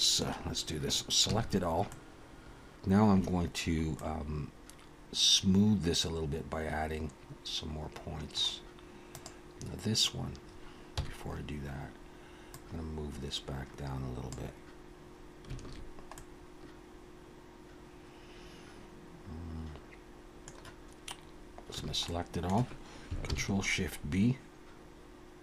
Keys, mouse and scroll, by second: 1.3 a, 1.9 middle click, 4.0 middle click, 9.1 click, 10.9 KP_1, 12.5 click, 15.6 alt+a, 16.1 middle click, 21.8 a, 22.0 middle click, 23.3 ctrl+shift+b.